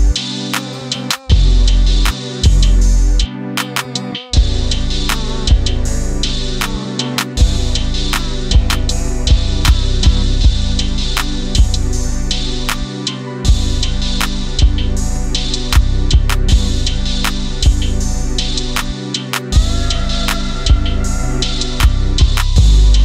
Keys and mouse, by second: 2.3 r, 3.2 click, 3.4-4.0 middle drag, 4.1 click, 4.4-8.2 middle drag, 8.8 middle drag, 9.9-10.3 middle drag, 11.7-12.9 middle drag, 13.4-14.5 middle drag, 15.1 click, 15.9-16.7 middle drag, 17.7 middle click, 18.7-19.5 drag, 20.8-22.1 drag.